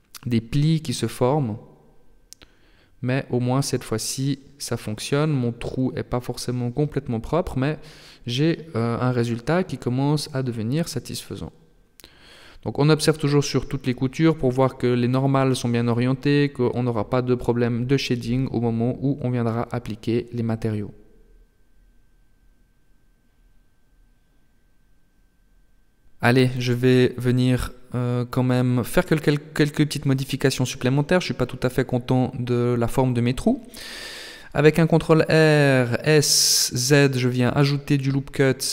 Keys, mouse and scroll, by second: 0.5 Tab, 1.1 middle click, 5.0-5.6 scroll down 6, 5.6 middle click, 10.9 shift+middle click, 11.6 middle click, 13.7 middle click, 14.9 shift+middle click, 16.0 middle click, 20.6-21.0 scroll down 1, 21.0-23.8 scroll up 2, 24.2 middle click, 25.7 KP_7, 27.8-28.4 scroll up 1, 28.4 shift+middle click, 29.4 Tab, 30.0-31.0 scroll up 1, 33.2 ctrl+r.